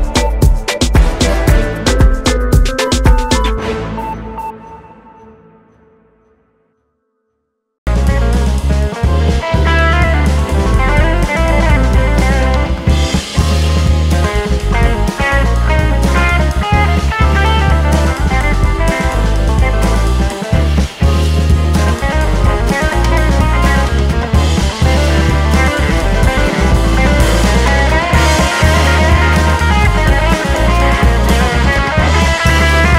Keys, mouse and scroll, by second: 4.0-4.8 scroll up 1, 4.8 click, 5.0 `, 5.5 3, 5.6 click, 6.0 shift+click, 6.4 `, 6.9 g, 7.6 right click, 8.0 click, 8.3 `, 9.0 click, 9.2 KP_Decimal, 9.5 scroll down 2, 10.8 g, 13.7 2, 14.8 click, 16.1 x, 17.7 alt+click, 18.1 click, 18.9 e, 19.8 click, 20.2 `, 20.8 click, 21.0 `, 21.6 click, 23.1 shift+click, 24.4 f, 25.2 alt+click, 25.7 click, 26.6 ctrl+z, 27.0 ctrl+click, 27.4 ctrl+click, 27.9-28.2 scroll down 1, 28.2 ctrl+click, 28.4 `, 29.1 ctrl+click, 29.8 `, 30.3 e, 31.9 click, 32.1 `, 32.8 g.